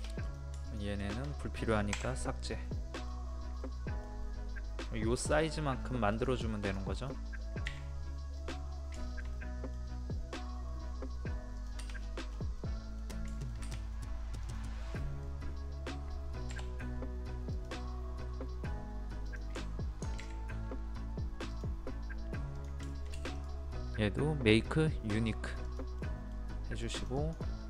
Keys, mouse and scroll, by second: 0.2 click, 0.7 shift+click, 1.9 shift+Delete, 2.6 middle click, 3.3 scroll up 1, 3.6 middle click, 5.7-6.1 scroll up 1, 6.1 click, 8.9 shift+middle click, 11.6 click, 12.0 scroll down 1, 12.3 scroll up 1, 12.6 middle click, 14.4 click, 14.8 middle click, 15.9 scroll up 1, 16.5-17.5 scroll up 1, 17.5 click, 21.5 click, 22.9 shift+middle click, 23.4 right click, 25.6 click, 26.0 middle click, 26.9 click.